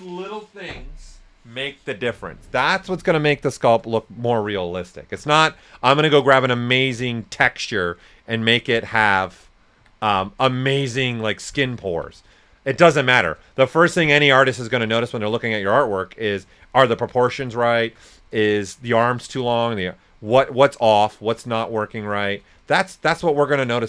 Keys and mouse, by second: 3.1-5.1 drag, 5.1 w, 6.4 alt+click, 7.2-9.7 alt+drag, 9.7 typing, 10.2 ctrl+right click, 12.7-13.4 typing, 13.8 right click, 14.5 click, 16.4-18.0 shift+drag, 17.7-18.5 typing, 18.0 right click, 19.9 click, 21.8 right click, 22.5 click, 23.3-23.8 shift+drag.